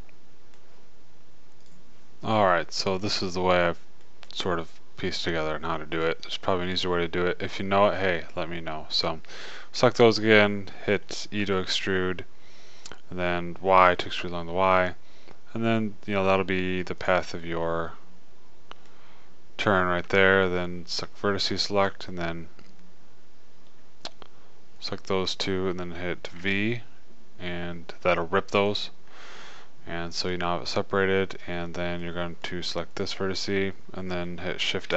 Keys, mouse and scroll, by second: 11.9 e, 18.0 middle click, 18.8 click, 19.4-21.3 middle drag, 21.3-23.9 drag, 26.8 v, 29.0-30.8 drag, 30.8-33.3 middle drag, 33.3-34.3 drag.